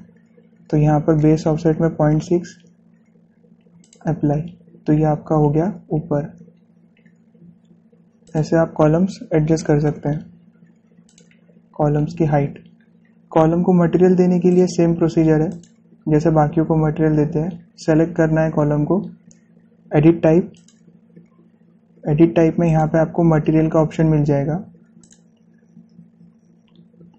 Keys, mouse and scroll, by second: 0.0 click, 2.9 Return, 4.7 click, 5.0 typing, 6.9 scroll down 1, 9.0 click, 10.7 Return, 11.9 click, 12.8 scroll down 1, 15.3 click, 21.4 click, 23.5 click, 25.9 click.